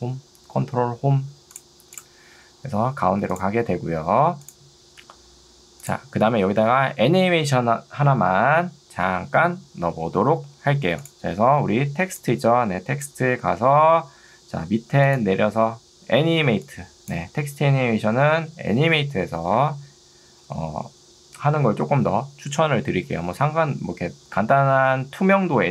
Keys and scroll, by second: 12.0 ctrl+2, 13.6 Escape, 16.4 ctrl+2, 19.6 Escape.